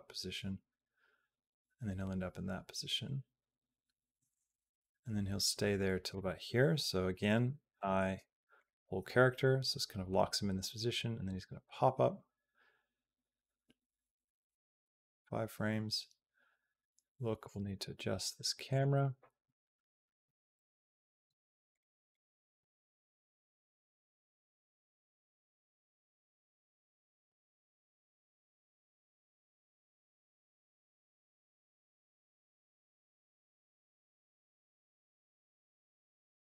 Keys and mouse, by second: 7.6 |, 9.2-17.3 drag, 18.5 click, 20.0 q, 21.6 click, 22.4 Tab, 23.8 click, 24.2 q, 25.5-26.7 middle drag, 27.1 shift+middle click, 28.1 shift+middle click, 30.2-31.3 shift+drag, 33.4 click, 34.8-36.5 drag.